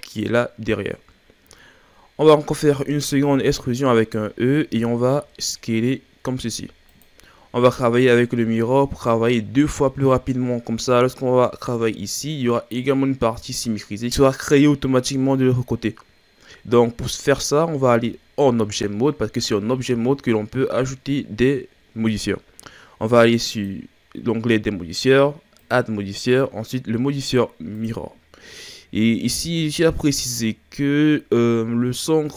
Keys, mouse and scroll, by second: 1.2-1.7 scroll up 3, 1.7-3.2 ctrl+scroll down 2, 3.2 e, 4.7 s, 8.2-8.9 scroll down 3, 8.9-9.4 ctrl+scroll down 3, 18.0 Tab, 19.9 ctrl+scroll up 1, 20.9-22.4 scroll up 1, 23.5 click, 27.9 click, 29.0-30.4 ctrl+scroll down 2, 30.4-31.4 scroll up 5.